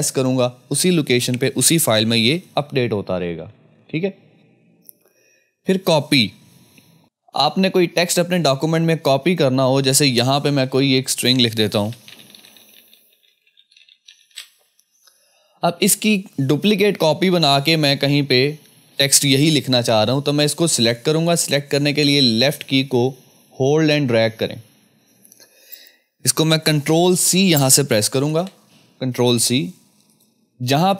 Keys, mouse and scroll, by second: 2.9 ctrl+s, 3.7 ctrl+s, 9.2 ctrl+s, 9.2 click, 10.4 Return, 11.6-14.7 typing, 16.5-18.5 scroll down 1, 21.4 scroll down 1, 21.5-28.2 drag, 28.2 ctrl+c, 30.1 click.